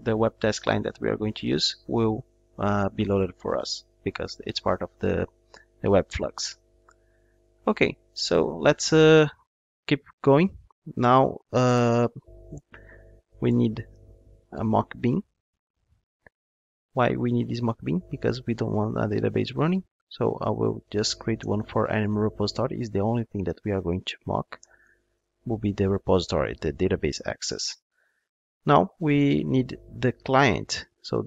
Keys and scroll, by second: 12.3 Tab, 16.0 Return, 22.1 Return.